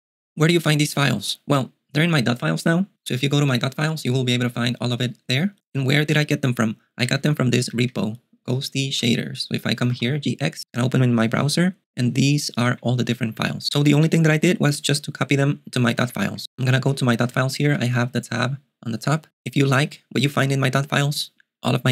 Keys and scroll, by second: 7.0-10.4 typing, 12.8 ctrl+alt+shift+super+6, 13.1 j, 13.4 j, 15.3-16.8 typing, 17.3 shift+super+].